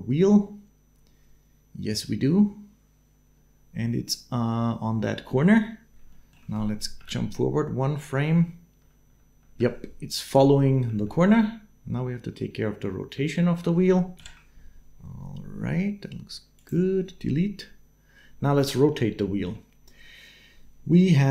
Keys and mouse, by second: 5.9 shift+click, 6.8 Right, 7.8 Right, 8.2 Right, 8.6 Right, 8.8 Right, 9.1 Right, 9.3 Right, 10.6 Right, 10.7 Right, 10.9 Right, 11.1 Right, 11.2 Right, 11.7-13.5 Right, 14.0 shift+Left, 16.4 click, 18.8 middle click.